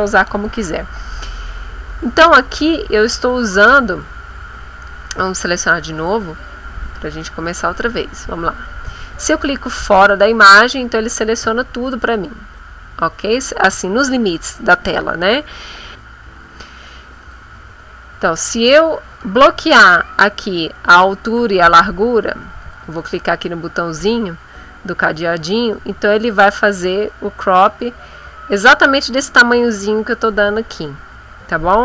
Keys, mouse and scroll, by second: 0.5 click, 1.1 click, 1.9 click, 3.2 click, 6.0 click, 7.1-9.6 drag, 11.4 Escape, 12.2 click, 16.2 Escape, 17.2 click, 21.8 click, 22.6 click, 25.7 click, 27.0 click, 31.6 click.